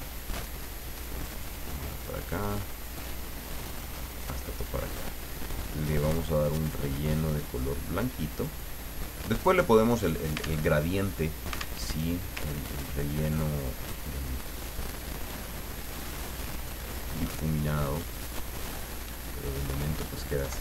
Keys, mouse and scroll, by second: 0.2 click, 0.7 click, 2.1 click, 4.1 click, 5.9 click, 6.6 click, 7.6-8.8 drag, 9.3 click, 10.6 alt+Tab, 11.8 alt+Tab, 12.5 ctrl+scroll up 2, 13.0 ctrl+middle click, 14.5 click, 16.1 click, 19.5 click, 20.4 Delete.